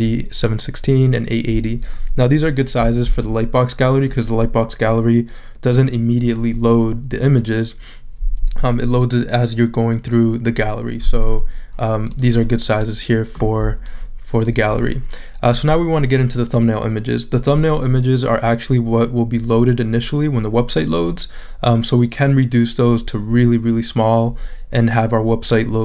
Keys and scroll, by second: 3.0 shift+super+z.